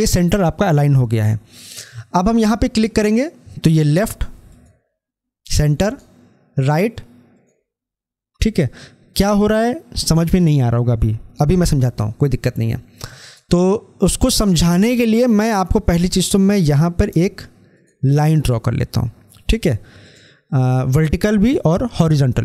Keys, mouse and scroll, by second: 2.6 click, 13.2 click, 17.6 ctrl+click.